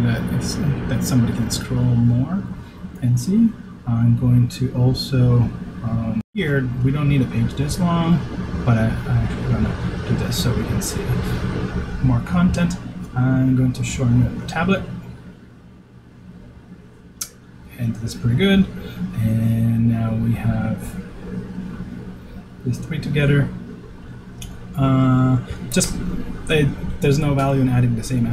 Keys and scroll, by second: 6.4 super+s.